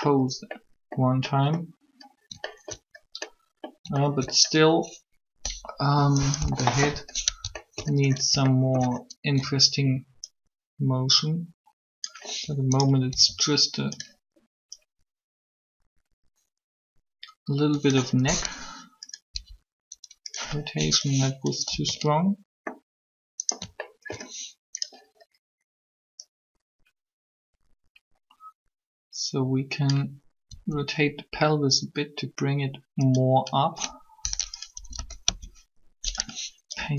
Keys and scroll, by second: 6.4 3, 13.1 r, 19.1 Up, 21.7 alt+a, 30.4 r, 34.6 Up, 34.8 Up, 35.0 Down.